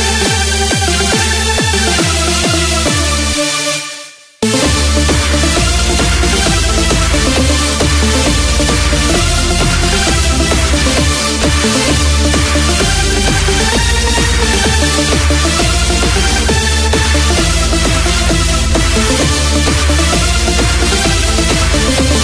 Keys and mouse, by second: 0.6-2.6 right drag, 2.6 click, 5.9 click, 7.9 click, 11.9 KP_6, 18.6 click.